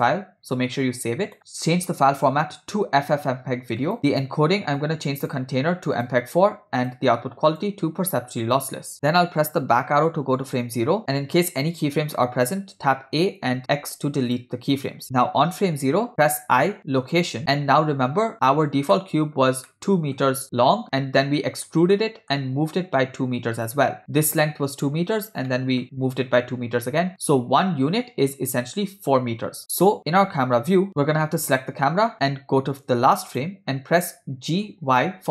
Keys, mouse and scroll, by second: 0.8-4.0 drag, 4.1 click, 4.8 click, 6.0-7.1 drag, 7.5-8.7 drag, 9.3 Left, 11.0 click, 13.1 a, 13.8 x, 16.5 i, 19.0-19.4 ctrl+middle drag, 19.7-20.2 middle drag, 20.4 scroll down 2, 20.5-21.7 ctrl+middle drag, 21.9-22.4 middle drag, 23.8 click, 25.5-25.8 shift+middle drag, 29.8 KP_0, 31.0 ctrl+middle click, 33.3 click, 34.6 g.